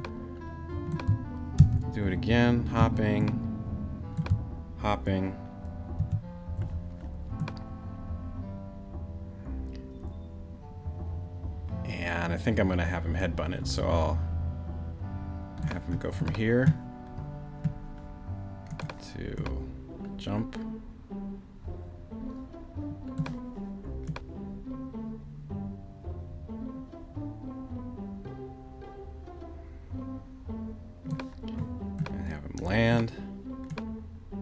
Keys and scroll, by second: 1.6 super+v, 6.0 super+v.